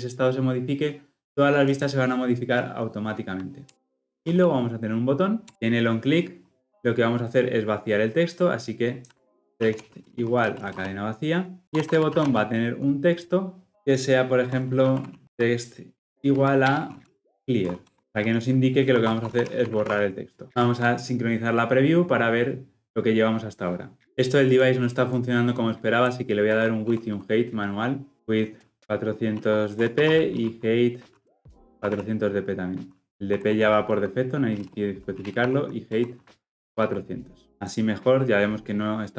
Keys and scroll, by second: 5.5 Return, 13.7 Return, 16.6 Return, 18.4 shift+Return, 28.1 Return, 35.9 Return, 37.6 ctrl+-.